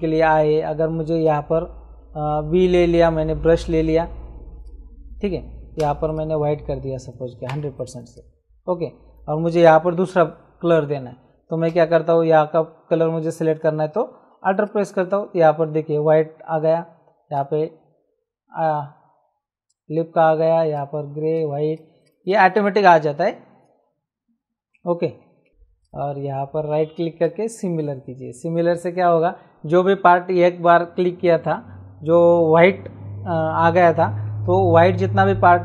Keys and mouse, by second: 1.1 click, 2.3 b, 4.5 click, 5.8 x, 6.1 click, 7.5 KP_0, 7.7 click, 14.5 alt+click, 17.3 alt+click, 20.6 alt+click, 25.5 shift+click, 25.8 right click, 27.2 click.